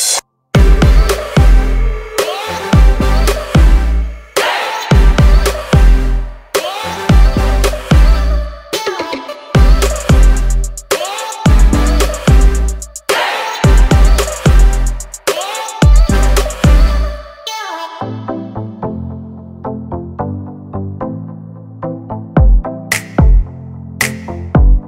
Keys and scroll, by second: 3.2 r, 5.1 space, 5.6 p, 15.1 space, 17.1 r, 19.1-20.5 typing.